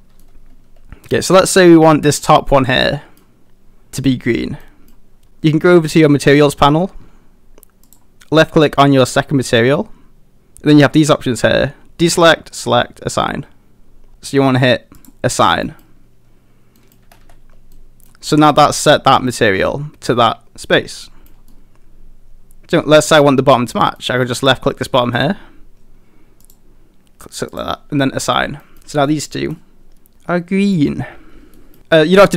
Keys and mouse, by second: 0.2 middle click, 1.4 middle click, 2.1 click, 2.8 middle click, 4.6 middle click, 7.8 click, 15.0 click, 15.6 middle click, 16.8 middle click, 17.0 a, 17.2 a, 17.7 middle click, 21.0 middle click, 21.5-22.7 middle drag, 23.1 click, 24.0 middle click, 24.8 middle click, 26.4 click, 28.6 middle click, 28.7 a, 29.1 middle click, 29.8 middle click, 31.5 middle click.